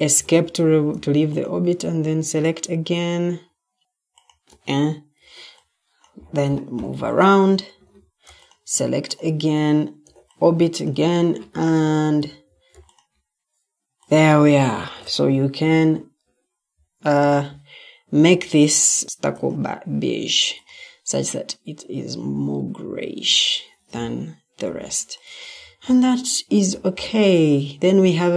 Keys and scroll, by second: 0.1 Escape, 7.8 Escape, 11.2 Escape, 12.1 Escape, 13.8 typing, 14.7 ctrl+t, 19.0 s, 23.2 Escape, 24.5-25.3 typing.